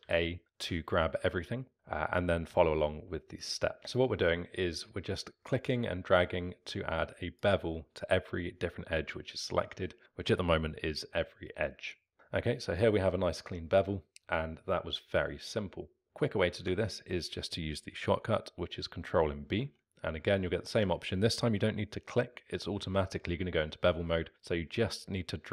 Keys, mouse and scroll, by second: 0.0 a, 1.7 ctrl+z, 3.4 click, 3.8 ctrl+z, 3.9 click, 12.1-15.4 alt+middle drag, 16.0 ctrl+z, 19.4 ctrl+b.